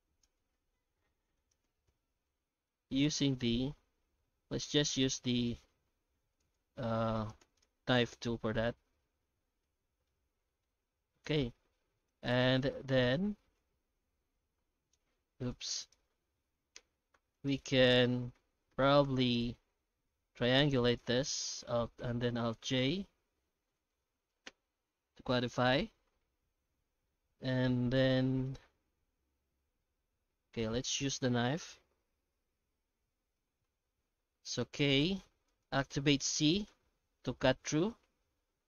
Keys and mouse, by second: 1.2 3, 1.4 right click, 1.6 x, 2.3 shift+middle click, 2.9 k, 6.9 3, 7.1 right click, 7.4 x, 8.2 Tab, 8.6 Tab, 9.2 shift+z, 9.6 middle click, 10.4 1, 12.1 right click, 12.8 3, 13.0 right click, 13.4 Tab, 14.0 shift+h, 14.3 Tab, 15.1 alt+h, 15.5 alt+a, 15.8 right click, 16.4 shift+h, 16.7 Tab, 17.1 3, 17.3 right click, 18.3 a, 19.0 3, 19.2 right click, 20.3 ctrl+t, 21.0 middle click, 21.9 alt+j, 23.0 F9, 27.1 alt+middle click, 27.5 alt+a, 28.1 shift+middle click, 28.8 1, 34.6 k.